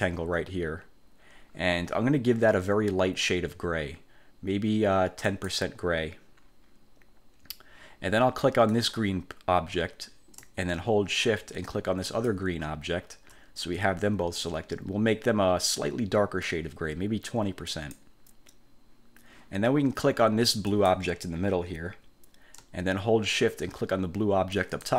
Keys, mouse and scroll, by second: 5.4 click, 8.8 click, 12.2 shift+click, 17.8 click, 20.8 click, 24.7 shift+click.